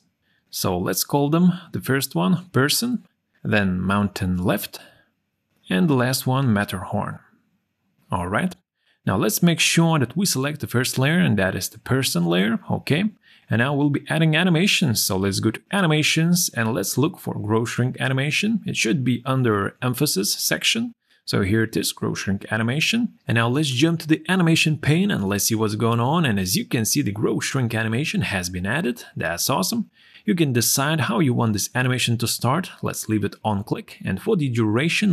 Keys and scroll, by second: 3.1 r, 3.3 Return, 5.3-6.9 typing, 5.5 Return, 7.1 Return.